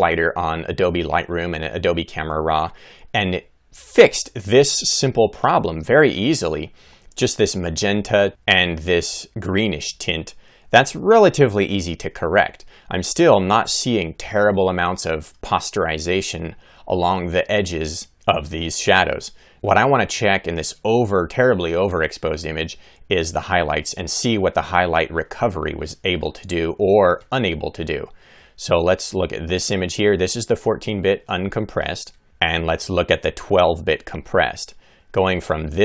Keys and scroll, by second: 4.7 Right, 5.8 Left, 8.2 Right, 8.7 Right, 9.4 Left, 10.3 Right, 11.0 Left, 11.6 Right, 12.2 Left, 12.7 Right, 13.3 Left, 14.7 Right, 19.5 Right, 34.1 Left, 35.3 Right.